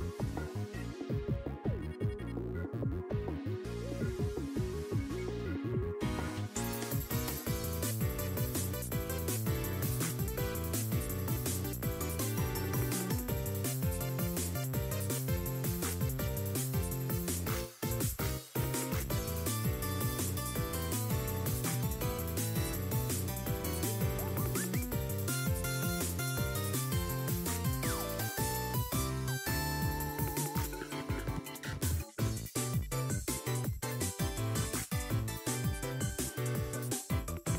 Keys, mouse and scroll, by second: 6.2-8.5 drag, 10.9-11.5 scroll down 3, 11.5-12.2 scroll up 2, 12.7-14.8 drag, 15.4-15.8 scroll down 2, 15.5 middle click, 15.9-16.6 scroll up 2, 16.6 r, 17.6 r, 27.3-28.5 scroll up 6, 27.5 shift+middle click, 28.1 r, 28.7-29.3 scroll up 2, 28.8 middle click, 29.6 r.